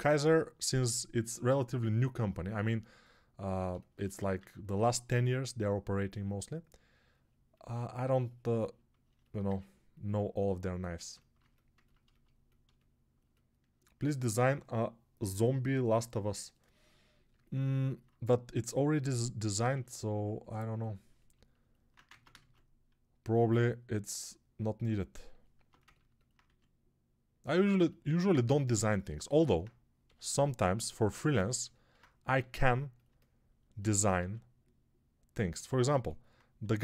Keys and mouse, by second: 3.9 1, 22.0 ctrl+Tab, 22.2 shift+a, 25.4 Tab, 27.1 s, 28.1-36.8 middle drag, 28.1 g, 29.9 g, 32.2 g, 34.1 s, 36.5 s.